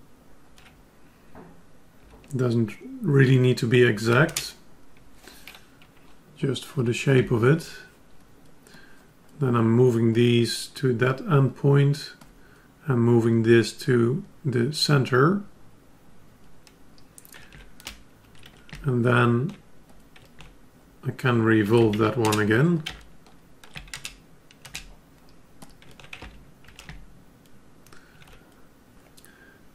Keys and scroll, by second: 7.1 F10, 26.2 ctrl+Tab.